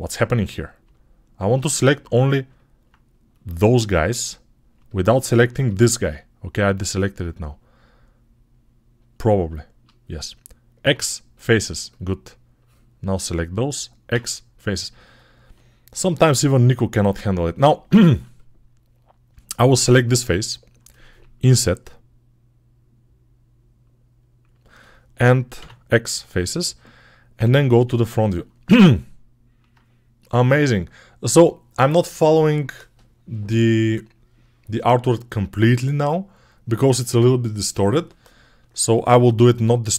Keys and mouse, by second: 3.3-5.6 drag, 5.6-6.9 shift+middle drag, 7.3-12.5 alt+middle drag, 10.6 x, 12.5-18.2 drag, 13.9 x, 18.2-28.3 middle drag, 21.2 i, 25.4 x, 28.5 alt+middle click, 29.1 ctrl+alt+right click, 29.2-39.9 ctrl+alt+middle drag.